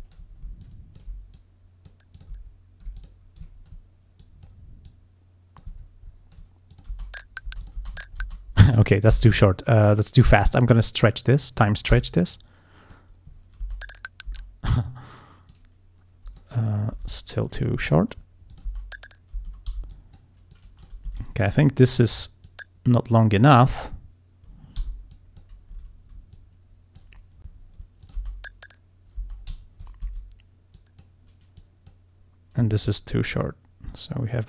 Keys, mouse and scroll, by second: 0.0 ctrl+alt+scroll up 3, 0.7 ctrl+alt+click, 1.4 alt+click, 2.2 alt+click, 2.5 alt+scroll down 2, 3.1 alt+click, 3.6 ctrl+scroll down 2, 4.3 click, 4.9 click, 5.8-6.4 ctrl+scroll down 2, 6.8 ctrl+click, 7.0 ctrl+space, 7.7 click, 8.2 ctrl+scroll up 1, 9.2 t, 10.6 click, 12.0 t, 12.2 click, 13.7 space, 14.4 space, 15.6-16.6 drag, 17.0 t, 17.2 click, 18.1-18.4 ctrl+scroll down 2, 18.6 ctrl+click, 18.7 ctrl+space, 19.4 space, 19.8 g, 20.0 click, 20.6 click, 21.2 e, 21.3 ctrl+scroll up 2, 22.5-23.8 drag, 24.9 g, 25.2 click, 25.9 e, 26.4 click, 27.7 ctrl+scroll down 2, 28.1 ctrl+click, 28.2 ctrl+space, 29.6 ctrl+space, 29.7 ctrl+scroll up 2, 30.3 ctrl+d, 30.8 click, 31.6 click, 32.8 ctrl+scroll up 2, 33.5 click.